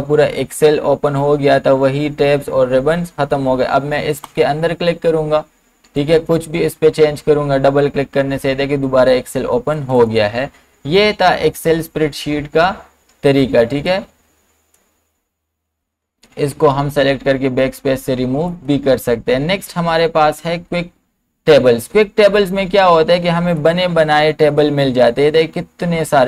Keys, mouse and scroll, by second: 4.2 click, 9.8 click, 13.9-15.8 drag, 15.8 BackSpace, 18.5 click, 23.6 click, 23.6-26.2 drag.